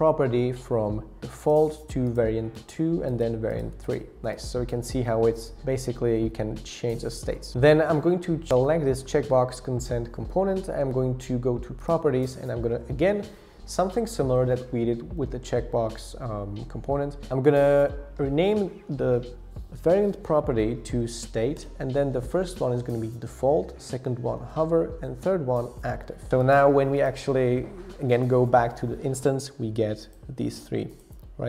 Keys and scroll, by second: 20.8-22.8 typing, 24.1-26.8 typing.